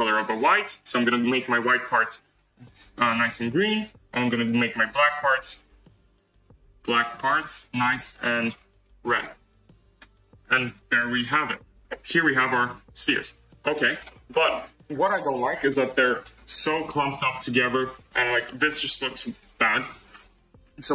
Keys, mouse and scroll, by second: 4.9 click, 6.8-7.8 drag, 10.9-11.7 middle drag, 11.7 scroll down 1, 12.0-13.9 middle drag, 13.9 click, 14.2-14.6 scroll up 4, 15.0-16.2 shift+middle drag, 16.2-16.5 scroll down 7, 16.7-17.1 shift+middle drag, 17.1-17.4 scroll up 9, 17.7 shift+middle click, 18.2 scroll up 2, 18.4-20.0 middle drag, 20.0 click.